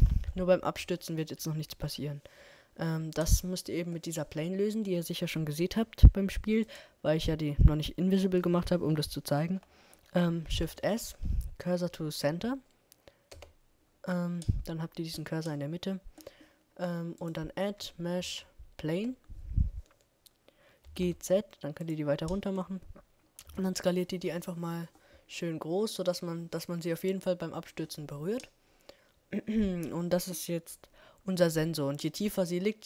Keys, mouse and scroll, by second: 0.4 middle click, 1.1 KP_0, 1.8 middle click, 2.5 middle click, 4.4 middle click, 5.7-7.4 right drag, 7.0-8.8 middle drag, 9.3 shift+s, 12.4-17.6 middle drag, 17.6 click, 18.3-19.3 scroll up 1, 19.3-19.9 scroll up 1, 19.3 g, 20.5 middle click, 21.7 s, 25.2-29.0 middle drag, 29.3-32.8 middle drag.